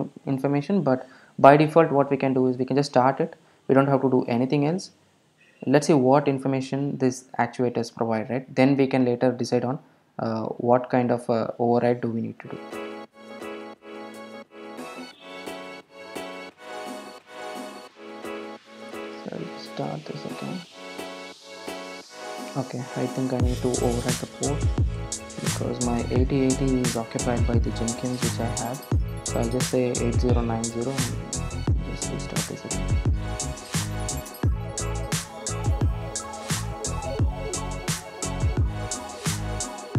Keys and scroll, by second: 10.5 super+F2, 18.8 ctrl+alt+super+;, 20.3 ctrl+r, 30.2 super+s, 31.4 super+r, 33.5 super+s.